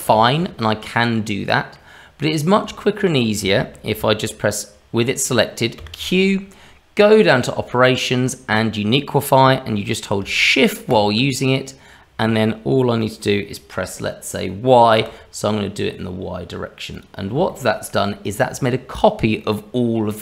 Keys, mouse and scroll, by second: 0.1 shift+middle click, 0.9 middle click, 2.2 middle click, 2.7 shift+middle click, 3.4 middle click, 5.8 q, 17.5 shift+middle click, 19.4 middle click.